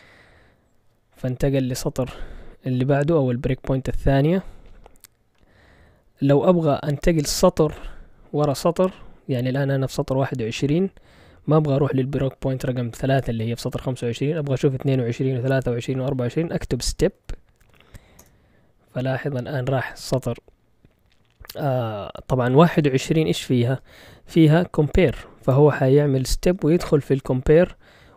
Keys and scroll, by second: 16.5-17.6 typing, 18.2 Return.